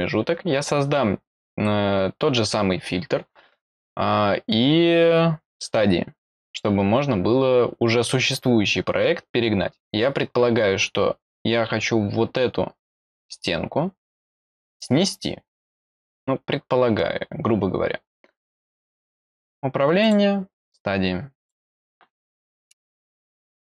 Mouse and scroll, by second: 8.6 middle click, 19.1 click, 20.0 click, 21.4 click, 23.1 click, 23.4 click.